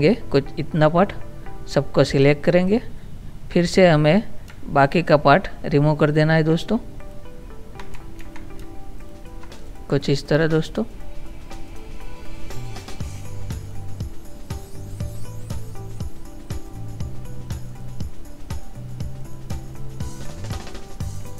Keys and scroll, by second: 8.4 ctrl+z.